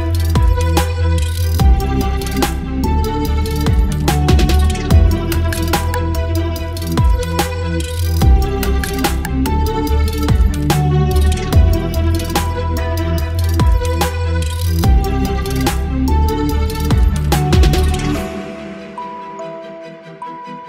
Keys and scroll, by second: 1.5 ctrl+j, 4.7 ctrl+t, 15.7 Return.